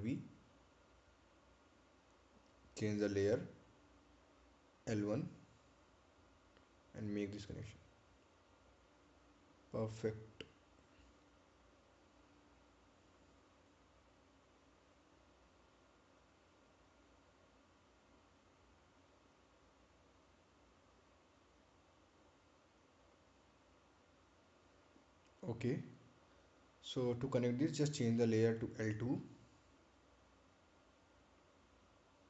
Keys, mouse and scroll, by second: 0.3-0.8 scroll up 1, 2.9 ctrl+v, 3.5 click, 4.2 right click, 6.7 click, 10.7 scroll down 1, 13.4 right click, 14.9 click, 20.0 ctrl+click, 25.8 scroll up 1, 29.7 click.